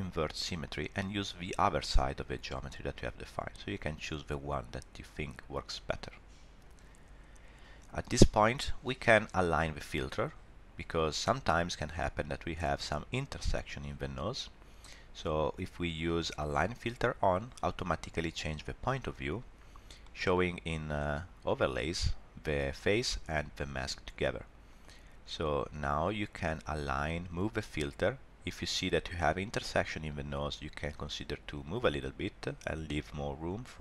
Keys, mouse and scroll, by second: 0.2 click, 3.4 click, 16.5 click, 20.0 shift+middle click, 20.6-23.0 scroll up 1, 24.7 click, 30.5 click.